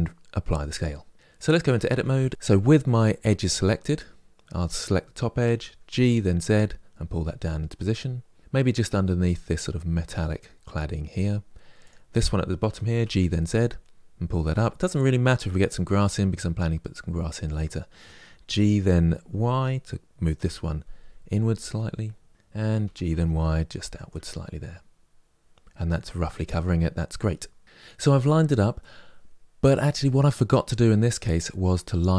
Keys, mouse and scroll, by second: 0.3 ctrl+a, 1.3 Tab, 2.3 click, 5.2 g, 11.6 click, 12.4 g, 17.3 click, 18.2 g, 22.3 click, 22.6 g, 27.6 KP_3, 28.5-32.1 middle drag.